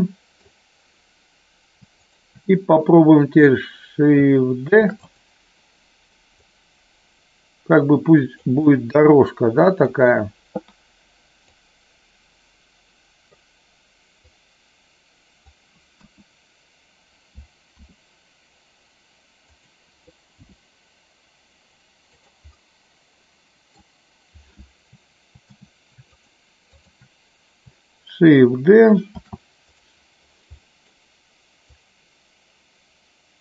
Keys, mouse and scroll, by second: 1.9 shift+click, 4.8 shift+d, 4.9 click, 6.3-8.3 drag, 8.6-10.0 middle drag, 11.6-13.3 drag, 14.1-15.3 drag, 16.0 KP_1, 17.8 r, 19.4 click, 20.4 g, 22.2 click, 22.6-23.7 middle drag, 26.6 shift+click, 29.2 shift+d, 30.6 middle click, 31.6-33.4 drag.